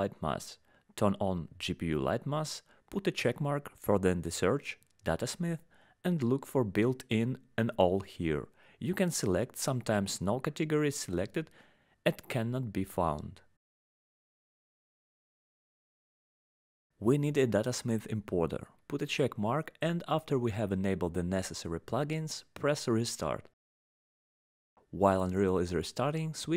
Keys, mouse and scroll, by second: 0.7 click, 0.7 scroll down 11, 1.3 scroll, 1.9 click, 5.1 click, 8.3 click, 17.1 click, 18.7 click, 19.7 click, 20.0-22.1 scroll, 22.8 click, 23.4 scroll down 10, 24.2 click, 25.4 click.